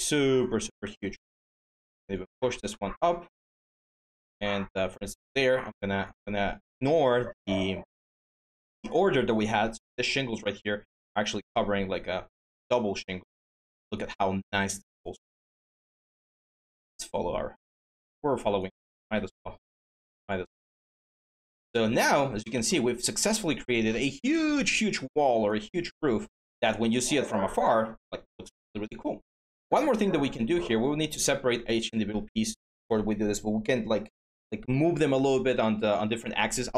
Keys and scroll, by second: 0.6 ctrl+d, 15.6 ctrl+z, 18.9 ctrl+z, 29.8 w.